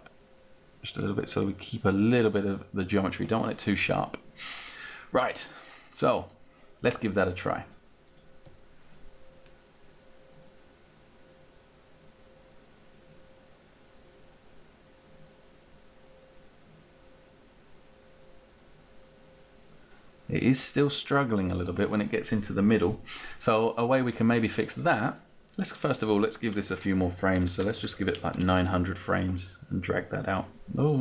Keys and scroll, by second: 27.4 9, 27.8 0, 28.4 Return.